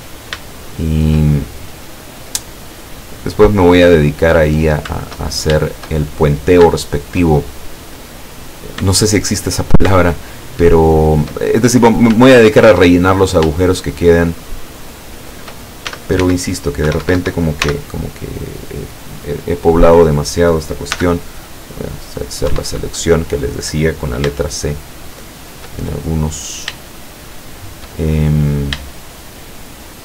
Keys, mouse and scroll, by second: 0.0 scroll up 1, 0.5-2.6 shift+middle drag, 2.6-3.2 scroll up 1, 3.6 scroll down 2, 4.1-5.1 middle drag, 5.3 shift+right click, 5.7 shift+right click, 6.1 shift+middle click, 6.9 shift+right click, 7.4-9.0 shift+middle drag, 9.2 shift+right click, 10.0 shift+middle click, 10.9 shift+right click, 11.4 shift+middle click, 12.6 shift+right click, 12.9-13.7 shift+drag, 13.5 shift+middle click, 13.9 shift+right click, 14.3 shift+right click, 14.7 shift+right click, 15.2 shift+right click, 15.9 shift+s, 16.2 shift+x, 16.9 Escape, 17.7 x, 18.2 click, 18.7 scroll down 2, 19.3 middle click, 21.0 c, 21.3-22.5 drag, 22.5 Escape, 22.7 middle click, 24.5 shift+right click, 25.2 shift+right click, 25.8-26.9 shift+middle drag, 27.2 shift+right click, 27.6 shift+right click, 28.0 shift+middle click, 29.3 shift+right click, 29.8 shift+right click.